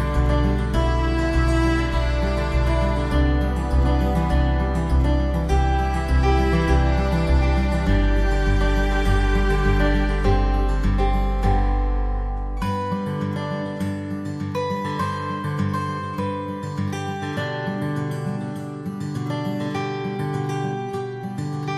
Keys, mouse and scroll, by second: 0.5 alt+middle click, 1.0 alt+w, 1.9 z, 2.4 middle click, 7.5 alt+w, 8.7 alt+middle click, 13.9 middle click, 14.3 alt+w, 17.7 alt+w, 18.4 alt+middle click.